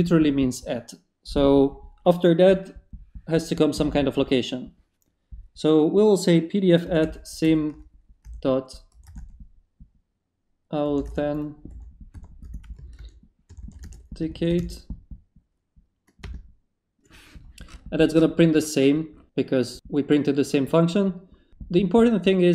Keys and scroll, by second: 6.6-9.5 typing, 10.6-15.6 typing, 16.2 Return.